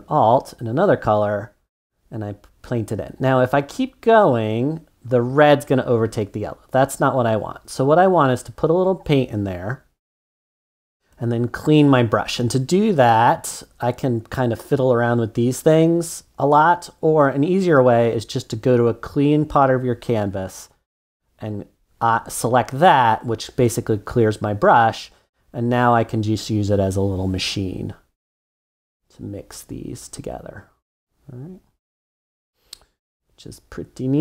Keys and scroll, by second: 6.3 super+z.